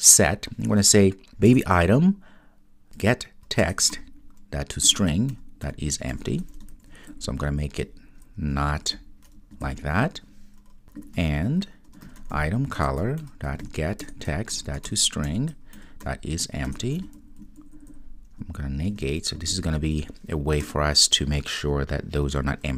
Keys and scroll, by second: 1.5 Return, 3.6 Return, 12.8 Return.